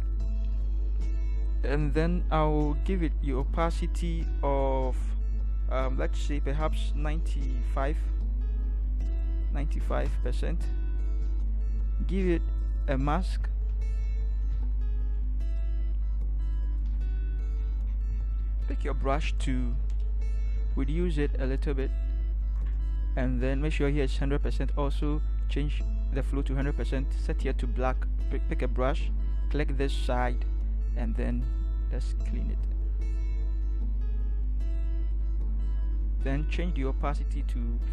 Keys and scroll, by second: 8.9 9, 9.5 5, 10.0 Return, 14.5 ctrl+0, 16.9 ctrl+=, 19.0 b, 20.4-21.3 typing.